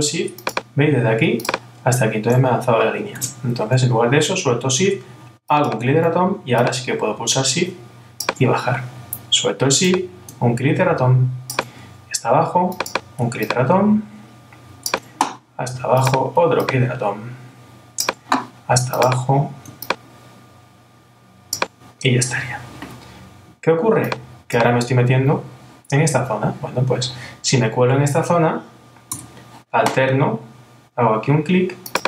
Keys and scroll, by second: 3.2 super+z.